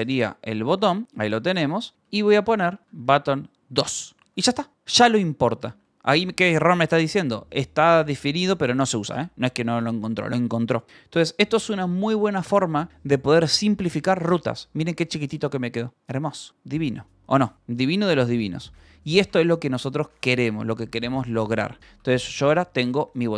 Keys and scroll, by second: 0.0-4.1 typing, 1.6 Escape, 4.1 Escape, 6.1 h, 14.8-15.9 typing, 17.4 Escape, 18.1-23.3 typing.